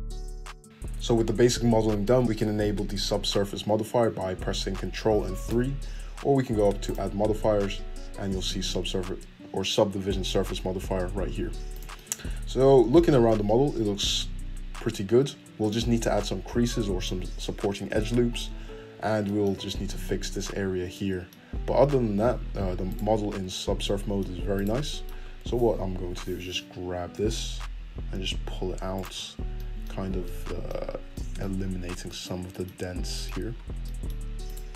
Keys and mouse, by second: 5.5 ctrl+3, 6.8-29.0 drag, 11.7 middle click, 11.7 right click, 21.7 `, 22.2 Tab, 22.9 right click, 23.3 Tab, 24.5 right click, 26.0 g, 29.0 middle click, 29.3 Tab, 29.3-33.9 drag, 30.9 Tab, 34.4 click.